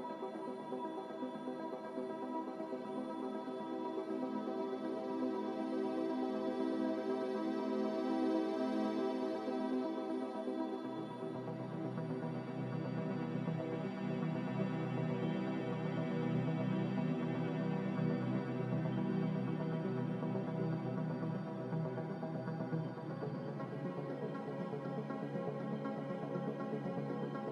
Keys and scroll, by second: 0.0 z, 1.4 5, 1.5 Return, 11.1 a.